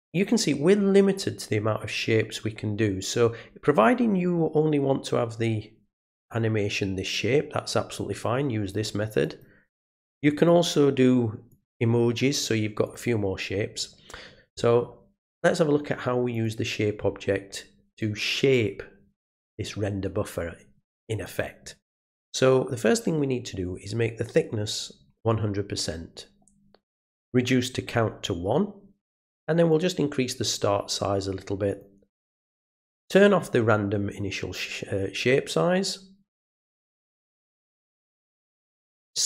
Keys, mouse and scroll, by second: 0.0 click, 9.2 click, 10.4 click, 11.5 click, 12.8 click, 16.3 click, 21.2 click, 23.0-24.3 drag, 27.3 click, 29.7-31.8 drag, 33.0 click, 38.7 click.